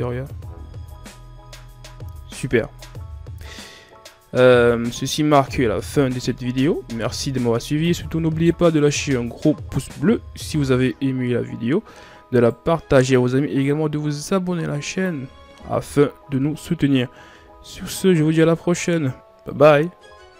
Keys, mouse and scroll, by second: 0.2-0.7 scroll down 4, 1.6-2.6 scroll down 2, 2.7 scroll up 1, 10.4 KP_3, 11.3-11.9 shift+scroll up 5, 12.1 right click, 12.5 Tab, 13.4-15.6 drag, 15.6 KP_1, 17.1 s, 19.1 click, 19.9 Tab.